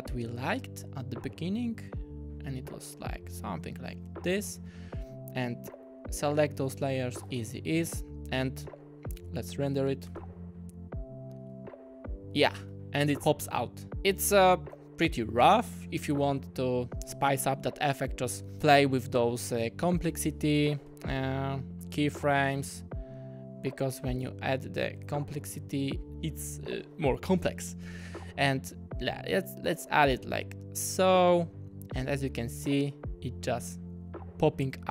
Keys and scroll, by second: 6.9 F9, 10.1 space, 12.6 space, 20.1 u.